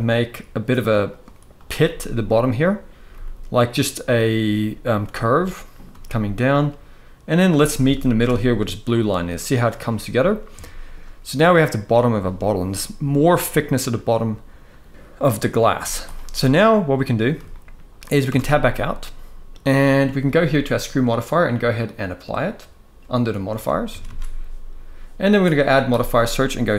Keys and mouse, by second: 1.2 click, 1.6 g, 2.0 click, 2.3 click, 2.8 g, 4.7 e, 5.4 click, 5.6 e, 7.0 click, 7.6 shift+middle drag, 10.3 shift+middle drag, 14.9 middle click, 16.2 middle click, 16.2 z, 17.2 shift+middle click, 18.0 Tab, 18.2-19.7 middle drag, 20.8-21.9 drag, 23.6 ctrl+a, 23.7 ctrl+a, 25.3-26.7 drag.